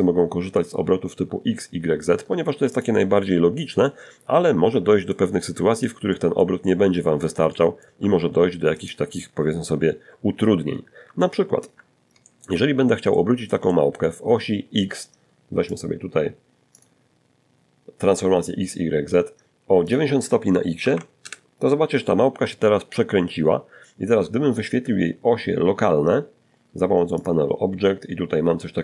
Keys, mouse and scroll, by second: 0.8 x, 0.9 click, 1.7 scroll down 1, 2.0-3.5 middle drag, 3.6 shift+middle click, 4.3-5.6 shift+middle drag, 5.7 shift+middle click, 7.0 shift+right click, 8.3-8.8 scroll up 2, 9.6 alt+shift+r, 10.4 alt+shift+middle click, 10.9 alt+shift+middle click, 11.3-12.3 alt+shift+scroll up 1, 13.9 click, 15.0 click, 18.1 click, 19.0 9, 19.4 Return, 19.4 0, 25.4 click, 25.8-27.0 scroll down 4, 27.4 click, 27.9-28.8 scroll down 2.